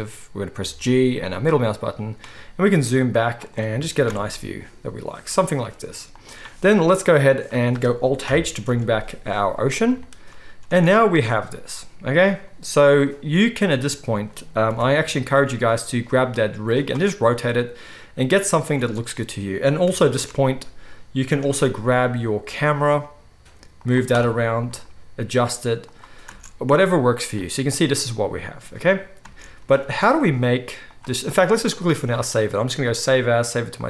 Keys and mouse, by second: 0.5 g, 3.5-13.1 right drag, 3.7 g, 8.2 alt+h, 8.8 alt+a, 10.7 space, 13.1 middle click, 13.3 right click, 13.6 middle click, 13.7-14.3 drag, 14.3-28.4 right drag, 14.6 r, 18.7 space, 19.0 click, 19.0 middle click, 19.8 r, 21.5 g, 24.6 g, 26.2 space, 28.4 click, 29.0-33.8 right drag, 29.2 space, 29.8 ctrl+s, 32.2-33.8 drag, 32.2-33.8 middle drag.